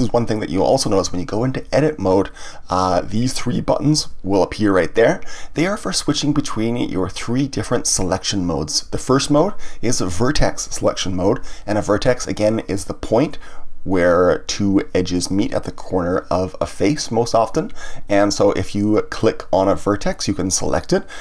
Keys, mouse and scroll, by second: 3.0 Tab, 19.1 click.